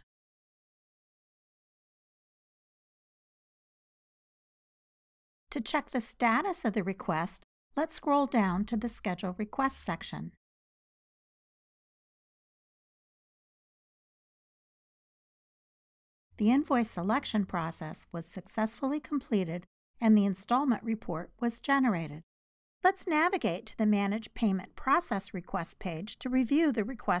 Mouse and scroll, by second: 4.9-9.0 drag, 9.4 click, 9.8 click, 9.9 click, 10.5 click, 11.0 click, 11.6 click, 17.0 click, 17.3 click, 19.3 click, 19.8 click, 20.4 click, 20.7-27.2 drag.